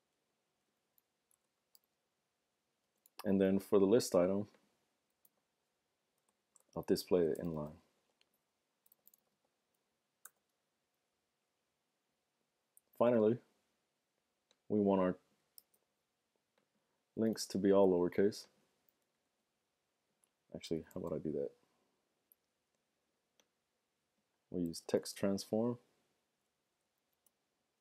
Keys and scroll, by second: 0.6 typing, 1.7-2.8 typing, 2.8 Return, 3.4 super+v, 8.8 typing, 15.6 super+c, 17.5 super+v, 19.1-20.8 typing, 24.8 typing, 26.3 Down, 26.3 typing, 26.4 Down, 26.5 Down, 26.7 Down, 26.8 Down.